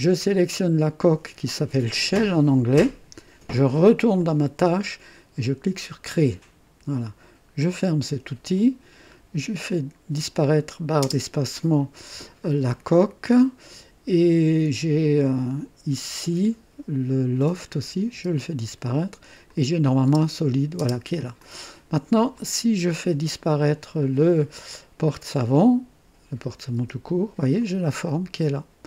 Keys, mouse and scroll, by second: 0.3-0.9 scroll down 2, 2.1 click, 4.1 click, 5.7 click, 7.6 click, 8.8 scroll down 1, 10.2 click, 11.0 space, 12.4-14.0 drag, 17.3 click, 18.1 space, 19.4 click, 20.1 space, 20.7 space, 21.4-22.1 drag, 22.3-23.2 drag, 24.0 click, 26.7 space, 26.8 space, 27.5-28.8 drag.